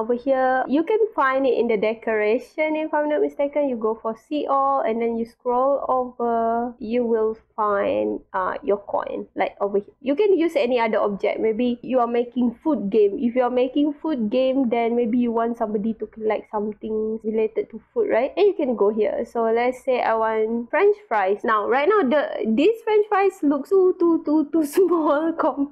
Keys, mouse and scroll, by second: 3.2 click, 4.4 scroll down 1, 5.0 scroll down 1, 5.7-6.2 scroll down 2, 7.1 scroll down 1, 7.6 scroll down 1, 8.1 scroll down 2, 10.5 scroll down 2, 11.4 scroll down 2, 12.3 scroll down 2, 12.9 scroll down 2, 14.8 click, 16.7 scroll down 2, 17.2 click, 19.4 scroll down 1, 19.9 scroll down 1, 20.5 scroll down 1, 21.1 click, 21.4-23.5 scroll up 12, 23.2 middle click, 23.4 middle click, 23.9-25.7 scroll down 7.